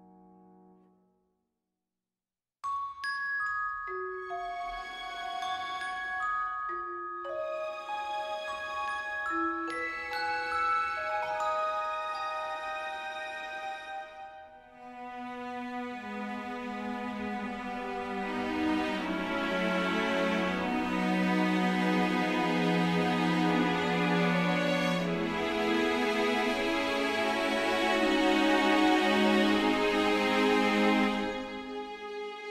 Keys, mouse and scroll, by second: 4.2 shift+z, 9.9 shift+z, 13.0 click.